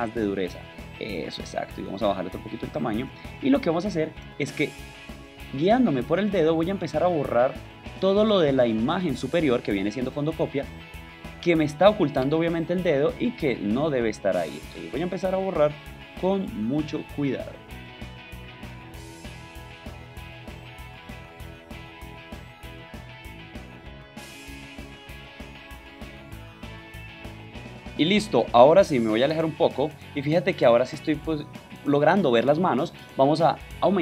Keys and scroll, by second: 3.1 ctrl+alt+space, 3.9 ctrl+space, 28.9 super+-, 29.9 super+space.